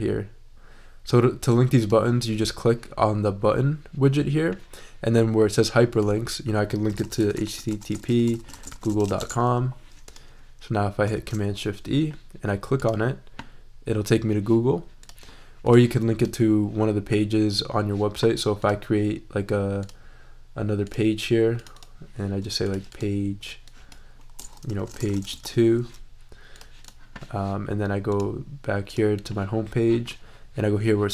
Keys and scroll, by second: 6.7-9.5 typing, 11.1 shift+super+e, 24.5-25.9 typing.